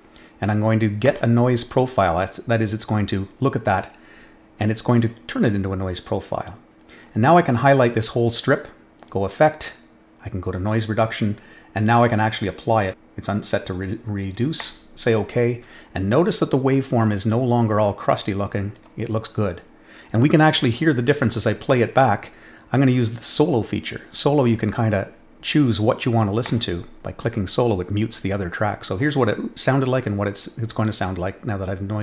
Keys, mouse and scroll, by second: 1.0 click, 4.9 click, 5.0 click, 8.9 click, 10.4 click, 12.9 click, 14.5 click, 15.6 click, 16.4 click, 17.6-18.1 drag, 18.7 click, 21.2 click, 23.0 click, 24.8 click, 26.4 click.